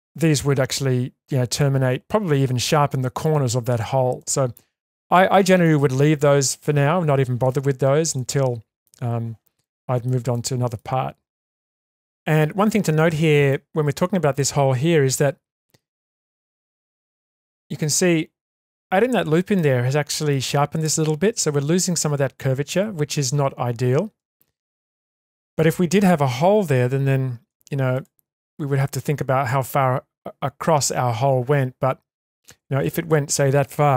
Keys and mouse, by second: 4.2-5.6 middle drag, 8.2-8.9 shift+middle drag, 9.7-10.1 shift+middle drag, 10.4 middle click, 11.6-12.0 shift+middle drag, 12.6-13.5 middle drag, 15.2 Tab, 16.8 shift+space, 17.5-18.6 middle drag, 19.5-20.3 shift+middle drag, 24.2 Tab, 25.1 middle click, 27.5 3.